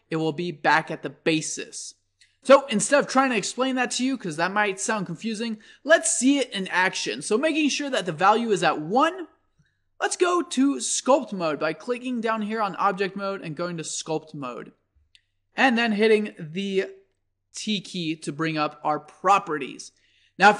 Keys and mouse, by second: 5.2-7.0 drag, 10.9 click, 17.5 t.